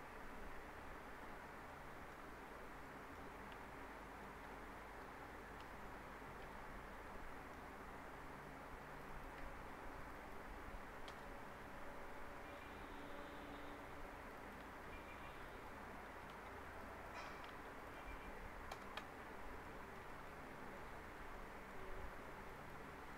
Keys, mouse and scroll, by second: 0.6-1.3 scroll down 1, 1.3-1.6 scroll up 1, 1.7-2.3 alt+middle click, 2.2 scroll up 1, 2.8 alt+middle click, 3.5 F4, 4.0 middle click, 4.4 F3, 5.6 F4, 6.4 p, 7.1-7.7 alt+middle click, 7.7-8.9 scroll up 1, 8.9 click, 10.0 ctrl+click, 11.1 ctrl+BackSpace, 11.8 scroll down 1, 12.4 alt+middle click, 13.2-14.2 scroll up 1, 14.2 click, 15.3 ctrl+click, 16.0 ctrl+z, 16.7 ctrl+click, 17.3 ctrl+z, 17.8 ctrl+click, 18.7 ctrl+BackSpace, 19.4 scroll down 1, 19.6 alt+middle click, 20.5 alt+middle click, 21.0 scroll up 1, 21.3-22.0 alt+middle click, 22.4 click, 22.9 alt+middle click.